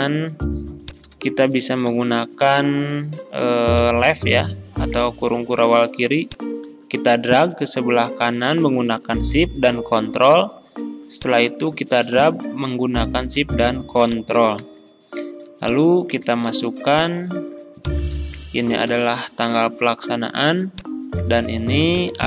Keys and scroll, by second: 1.1 ctrl+a, 1.9 ctrl+l, 16.5 ctrl+c, 18.1 ctrl+a, 18.9 ctrl+v.